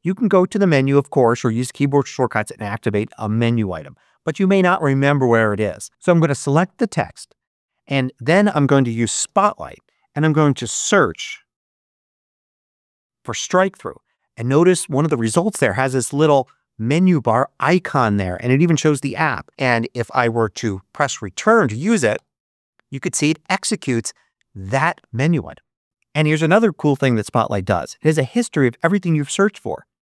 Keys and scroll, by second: 9.1 super+space, 10.6-13.2 typing, 22.1 Return, 22.8 Return.